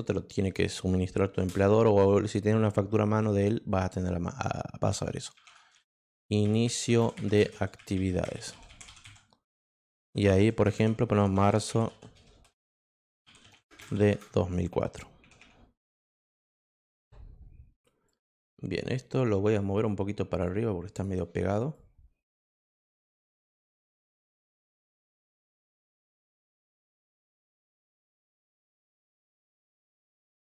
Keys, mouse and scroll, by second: 1.3 shift+Return, 5.7-14.7 typing, 18.0 click, 19.5 click, 20.9 click, 21.7 click, 22.5 click, 23.3 click, 23.8 click, 24.2 click, 25.5 click, 27.1 click, 27.6 click, 28.0 click, 28.5 click, 29.3 click, 29.9 click, 30.3 click.